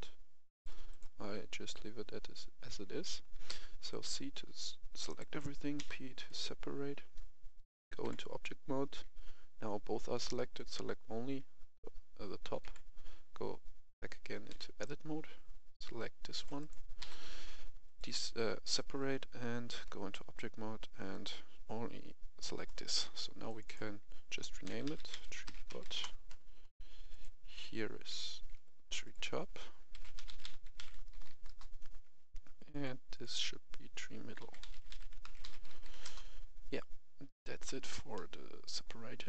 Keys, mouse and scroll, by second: 1.2 a, 3.4 c, 3.9 click, 5.0 right click, 5.7 p, 6.2 click, 8.0 Tab, 10.5 right click, 12.6 Tab, 14.4 c, 14.8-16.5 drag, 16.5 right click, 17.0 p, 17.8 click, 19.7 Tab, 21.1 right click, 23.4 click, 24.6-25.8 typing, 25.9 Return, 27.1 click, 28.0 F2, 28.4 Escape, 28.8 click, 29.9-31.3 typing, 31.4 Return, 32.7 click, 34.4-35.9 typing, 36.0 Return, 38.1 middle click.